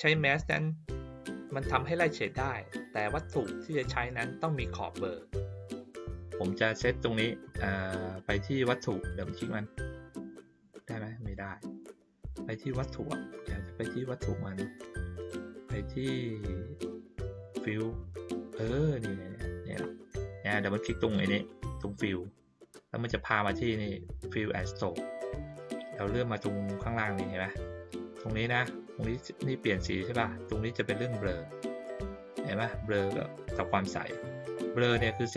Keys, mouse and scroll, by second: 9.0 click, 9.2 click, 11.2 click, 13.0 middle click, 17.3 click, 21.1 click, 21.3 click, 22.9 middle click, 25.8 middle click, 34.8-35.3 drag.